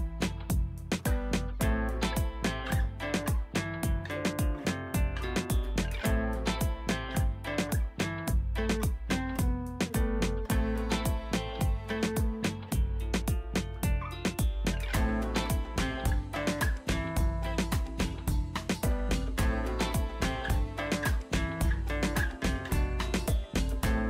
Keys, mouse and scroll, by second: 1.6 ctrl+space, 1.9 ctrl+click, 2.1 ctrl+space, 2.6 ctrl+space, 3.1 click, 3.2 space, 3.7 right click, 3.9 click, 7.5 click, 11.8-24.0 drag.